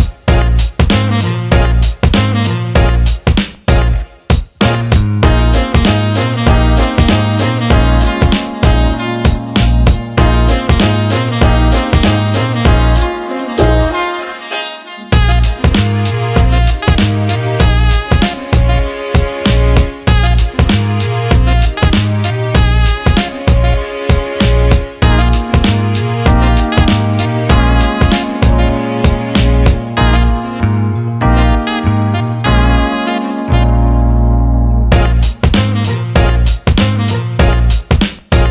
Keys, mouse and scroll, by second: 0.1 Tab, 0.8 alt+shift+middle click, 2.7 click, 3.4 click, 5.2 shift+d, 9.0 alt+shift+middle click, 9.7 alt+middle click, 10.7 click, 11.4 alt+middle click, 12.2 alt+middle click, 12.6 alt+shift+middle click, 14.0 alt+shift+middle click, 22.6-25.6 drag, 27.0-30.3 drag, 32.8 Tab, 34.2-35.6 right drag, 35.7-38.2 right drag.